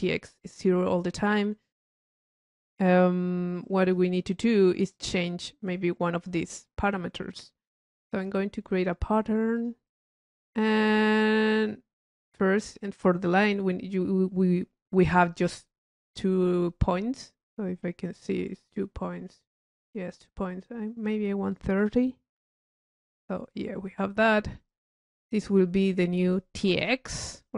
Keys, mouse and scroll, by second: 1.5 middle click, 4.1 click, 4.9-5.4 drag, 7.5-8.6 drag, 8.1 Tab, 9.8 click, 12.8 click, 15.6-17.8 drag, 18.0 middle click, 21.4 drag, 22.7 click, 23.2 middle click, 24.8 click, 25.6 click, 26.1 click.